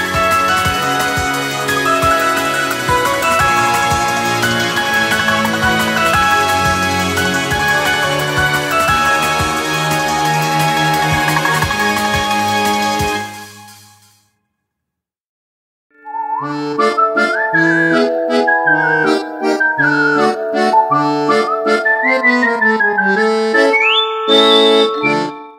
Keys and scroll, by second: 2.1 ctrl+-, 2.8 ctrl+-, 3.1 ctrl++, 9.1 ctrl++.